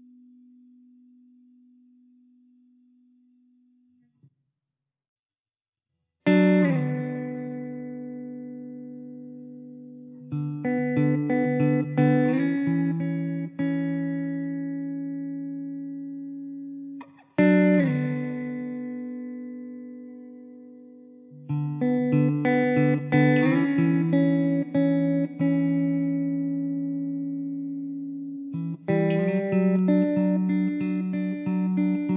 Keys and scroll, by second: 1.7 KP_0, 4.5 KP_0, 7.5 shift+a, 9.8 s, 12.4 s, 13.9 Tab, 14.2 3, 15.6 i, 17.1 e, 20.3 shift+a, 21.8 s, 24.6 s, 25.8 s, 26.9 `.